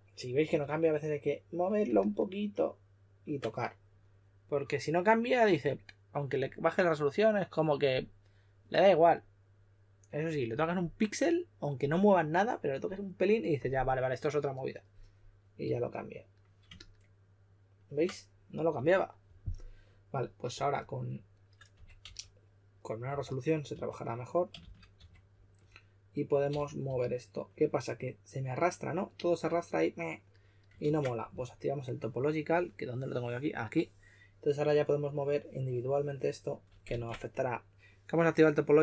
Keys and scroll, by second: 0.4 2, 15.6 2, 21.5-24.9 typing, 26.5 s, 30.8 super+z, 36.8 super+z.